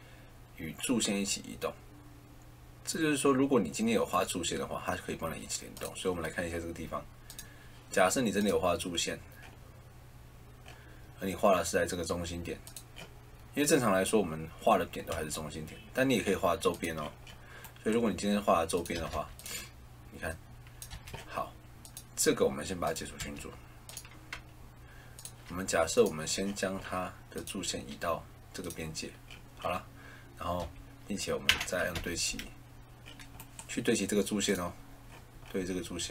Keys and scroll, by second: 15.0 Escape, 18.9 Escape, 20.8 Escape, 23.1 Escape, 30.5 Escape, 31.4 a, 31.9 l.